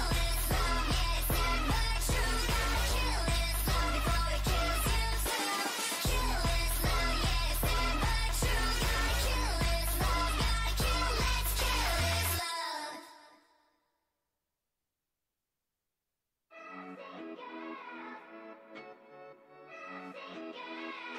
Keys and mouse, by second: 1.8 KP_1, 3.8 e, 4.9 z, 6.0 g, 7.1 s, 8.6 g, 9.5 z, 11.3 a, 11.5 a, 12.0 ctrl+n, 13.0 z, 14.8 ctrl+r, 17.9 click, 18.3 a, 18.6-21.1 right drag, 19.1 o, 19.5 g.